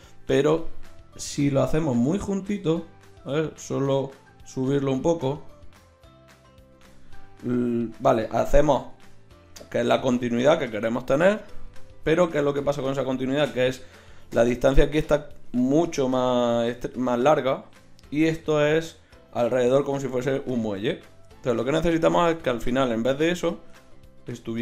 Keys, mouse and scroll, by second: 9.5 KP_1.